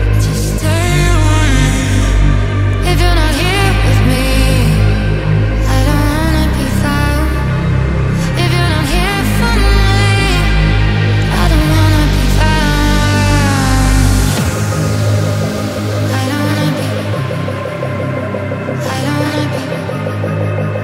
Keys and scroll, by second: 0.6-1.0 ].